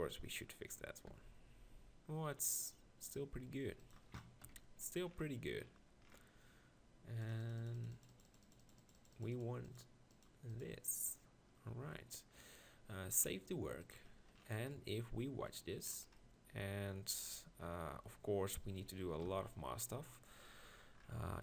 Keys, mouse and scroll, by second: 1.1 g, 4.5 KP_1, 11.6-12.8 drag, 12.8 middle click, 19.3 ctrl+KP_Decimal.